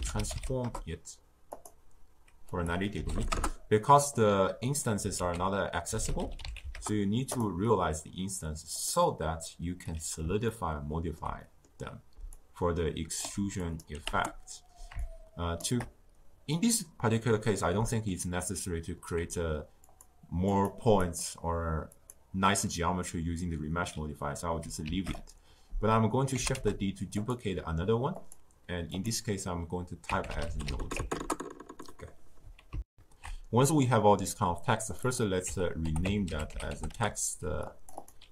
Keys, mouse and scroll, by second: 1.5 ctrl+a, 3.2-7.3 drag, 7.3 ctrl+a, 10.0-10.5 drag, 10.5-12.4 ctrl+middle drag, 12.4-16.5 shift+drag, 16.5-21.0 middle drag, 21.9-23.8 middle drag, 23.8 click, 24.8 shift+d, 26.4 g, 31.1-32.8 drag, 32.8 ctrl+alt+shift+q, 34.8 click, 35.0-37.8 drag, 38.0-38.3 drag.